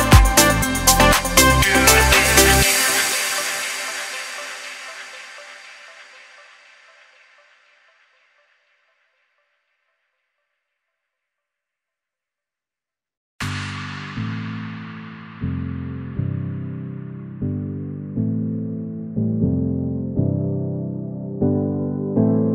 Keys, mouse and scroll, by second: 13.8 alt+scroll down 1, 14.6 click, 14.9 alt+scroll up 1, 15.9 click, 17.5-18.1 alt+scroll down 1, 18.4 alt+scroll up 1, 19.3 ctrl+z, 20.8 click, 21.2 scroll up 2, 21.7 click, 21.8-22.4 typing, 22.0 click.